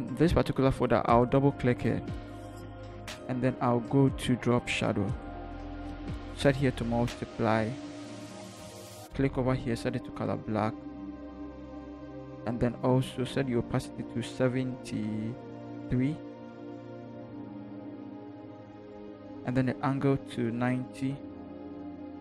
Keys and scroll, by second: 18.4 3.